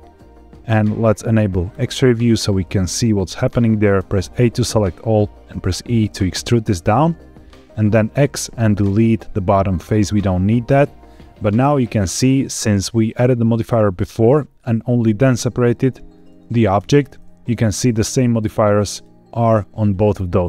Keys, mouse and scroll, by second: 1.6 click, 3.9 a, 5.8 e, 7.0 click, 8.1 x, 11.6 middle click, 16.7 Tab, 18.8 click, 19.7 click.